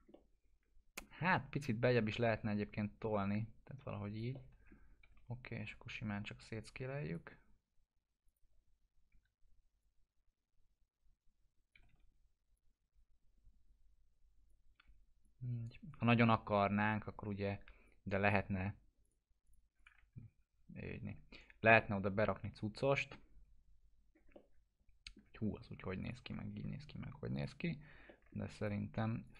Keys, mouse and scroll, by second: 0.1-1.0 alt+middle drag, 2.1-4.3 drag, 4.3-4.9 alt+middle click, 4.8 scroll down 1, 5.0 e, 5.7-7.2 drag, 9.1 w, 9.8-12.0 drag, 11.5-12.3 typing, 12.5-14.7 drag, 14.7 w, 15.2-16.1 click, 16.1 e, 16.9-18.1 drag, 20.1 F4, 20.7 scroll down 1, 21.7-23.3 alt+middle drag, 23.6-24.2 scroll up 1, 24.3-25.2 alt+middle drag, 26.0 click, 26.2 F4, 27.3 click, 27.7 alt+q, 28.0 alt+middle click, 29.2 click.